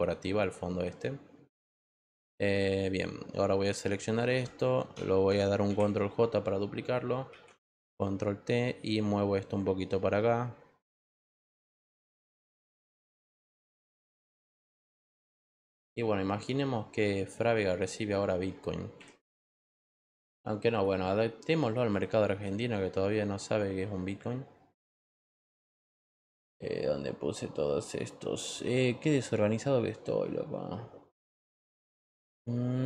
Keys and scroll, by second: 5.6 ctrl+j, 7.2 ctrl+t, 14.8 Return.